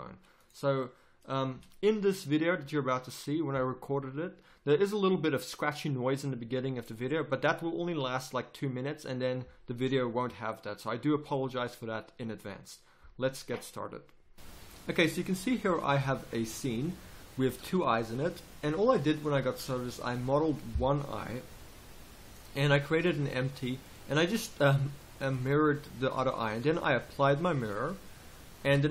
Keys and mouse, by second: 14.3 KP_1, 14.3 z, 14.3 a, 19.1-21.5 right drag, 21.5 g, 23.3-25.0 middle drag, 26.1-28.1 right drag, 28.6 Tab.